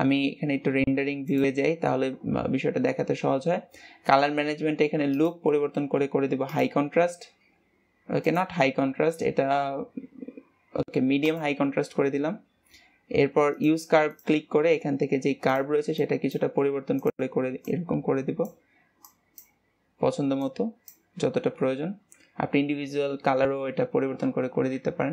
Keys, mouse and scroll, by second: 0.7-1.8 scroll up 3, 1.8 click, 3.3 scroll down 2, 5.7-8.7 drag, 8.9-11.8 drag, 16.0-25.1 drag.